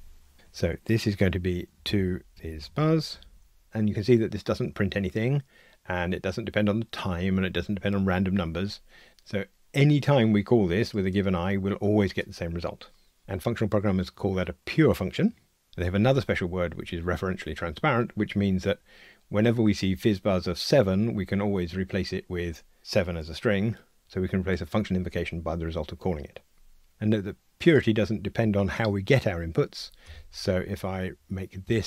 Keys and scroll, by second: 30.1 alt+Return.